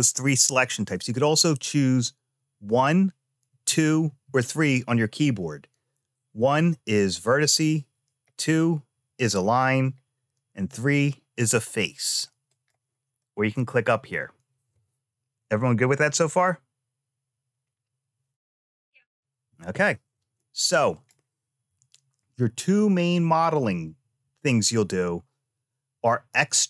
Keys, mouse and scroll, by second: 1.6 click, 2.1 1, 3.3 2, 3.8 3, 6.2 1, 6.9 click, 8.0 2, 8.9 click, 10.0 3, 10.5 click, 12.2 click, 20.7 click.